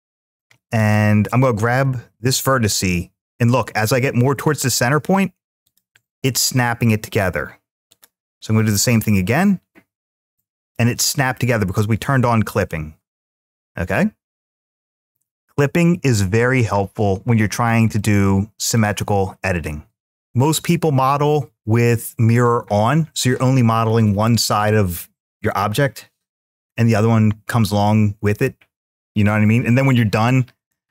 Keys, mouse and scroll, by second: 0.6 click, 1.9 g, 5.4-7.8 drag, 8.6 g, 10.4 click, 11.1-14.6 middle drag, 17.8 middle click.